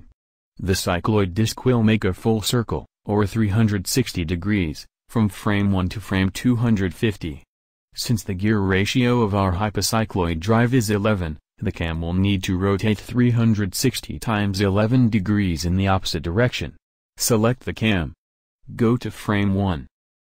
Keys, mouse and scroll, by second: 17.6-20.2 right drag.